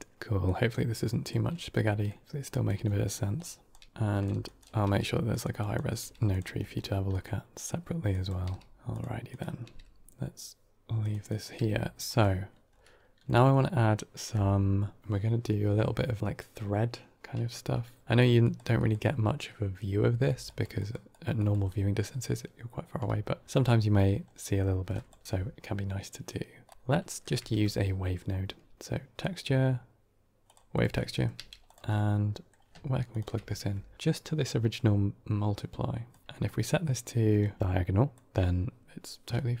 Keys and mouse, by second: 0.3-1.2 drag, 1.8 middle click, 2.2 g, 2.9 middle drag, 3.3-3.7 drag, 3.7 g, 3.9 drag, 3.9 g, 4.3 shift+drag, 4.7 g, 5.5 drag, 5.9-8.7 g, 6.5 middle click, 7.1 middle click, 8.1 click, 9.2 drag, 9.5 g, 11.2 drag, 11.4 g, 13.1 middle click, 18.0-18.8 typing, 18.0 click, 18.3-18.8 drag, 20.1-21.4 typing, 20.3 click, 20.6 click, 21.0 click, 21.2 click, 22.9 d, 23.4 d, 24.3 middle click, 24.8 drag, 25.2 g, 26.6 click, 27.0 middle click, 27.3 shift+a, 30.8 middle click, 31.2 g, 31.8 middle click, 33.0 ctrl+shift+click, 35.2-36.0 drag, 36.2 middle click, 37.3 middle drag, 37.6-38.1 drag, 38.7 middle click, 39.2 middle drag.